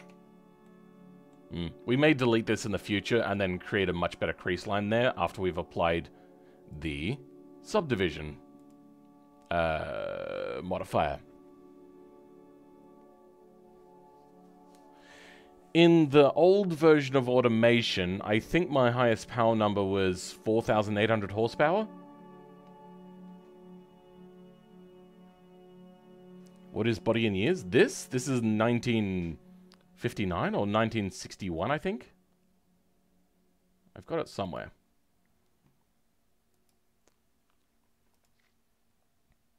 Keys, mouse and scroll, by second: 0.1-0.6 scroll down 5, 0.6-3.5 middle drag, 3.5-3.8 scroll down 5, 3.8 middle click, 4.3-39.5 right drag.